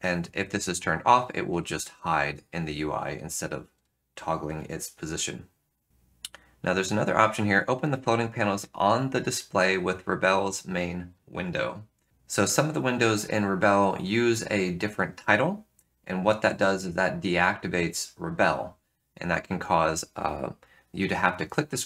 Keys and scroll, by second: 4.5 F3.